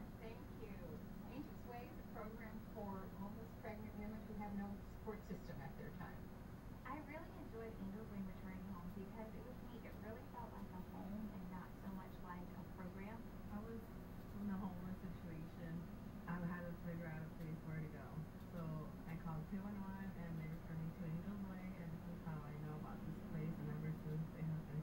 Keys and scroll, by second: 0.7 [, 2.1 [, 2.7 [.